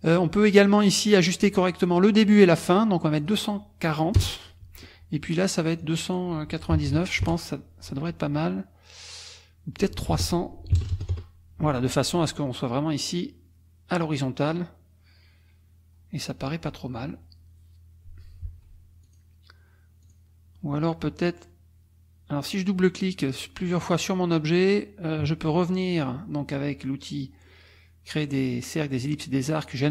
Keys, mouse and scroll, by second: 3.0 click, 4.2 BackSpace, 4.6 Tab, 5.4 click, 5.8 click, 6.7 KP_9, 7.2 Return, 8.3 click, 9.8 click, 10.1 ctrl+a, 11.1 Return, 18.4 F1, 19.0 click, 20.0 click, 23.7 click.